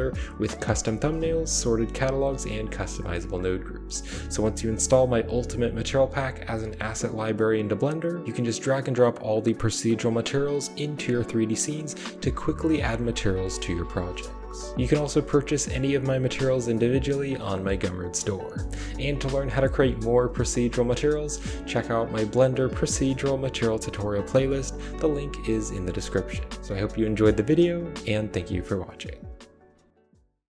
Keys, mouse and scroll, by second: 2.9 middle click, 2.9 scroll down 1, 14.4-15.4 typing.